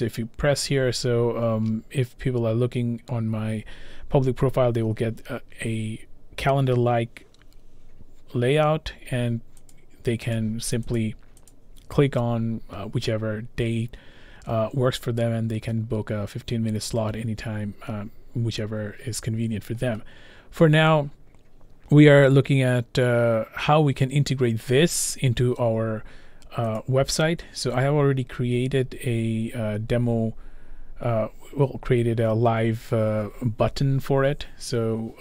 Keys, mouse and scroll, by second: 9.8 click, 10.4 click, 11.0 click, 11.5 click, 15.8-16.5 scroll, 20.0-21.0 scroll, 26.8 click, 27.6-30.4 scroll, 31.4 click, 31.4-32.1 scroll, 32.8-33.9 scroll, 34.4 scroll.